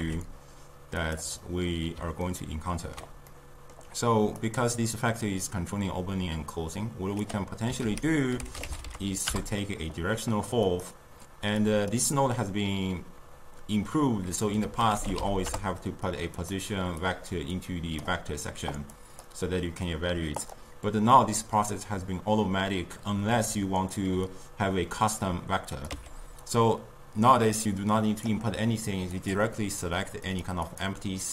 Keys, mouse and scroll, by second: 0.0 g, 1.4 scroll down 2, 1.4-4.4 middle drag, 4.4-7.5 drag, 7.8 ctrl+a, 11.6-14.6 drag, 14.6 ctrl+a, 17.1-19.0 drag, 20.4 click, 25.8 click, 25.9 x, 27.8-29.3 drag, 30.7 click.